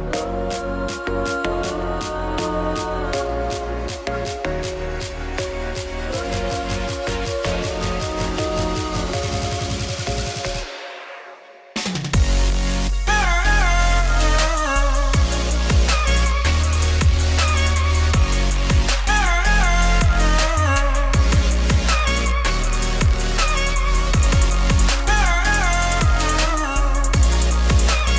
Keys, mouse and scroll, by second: 0.3-1.4 drag, 1.4 scroll up 4, 1.7 shift+middle click, 1.9-2.4 scroll down 1, 2.4 right click, 3.3-4.8 shift+drag, 6.5-7.8 scroll down 3, 7.8-9.4 drag, 9.6-11.0 scroll up 1, 11.0 click, 11.5 scroll down 2, 12.6 click, 13.7 scroll down 1, 13.9-15.1 shift+middle drag, 15.1 click, 15.9 right click, 16.7 click, 16.8 Tab, 16.9 3, 17.2 click, 17.5 ctrl+KP_Add, 17.6 ctrl+KP_Add, 17.9 g, 19.4 Tab, 19.6 click, 20.0 shift+middle click, 20.2-20.8 scroll up 1, 20.8 right click, 21.1 Tab, 21.2 2, 21.4 alt+click, 21.8 ctrl+b, 22.9 Tab, 23.5-27.2 drag, 27.5 shift+middle click, 27.7 scroll down 3, 28.0 shift+middle click.